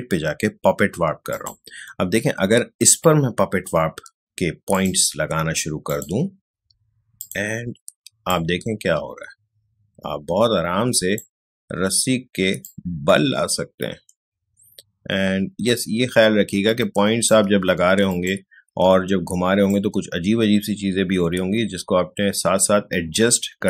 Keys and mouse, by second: 12.6-18.1 alt+drag, 19.6-23.6 alt+drag.